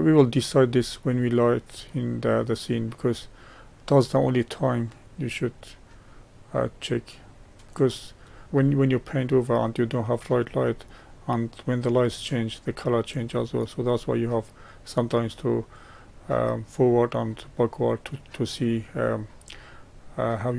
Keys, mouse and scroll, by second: 2.7-8.4 drag, 8.4-19.2 middle drag, 19.9-20.5 middle drag.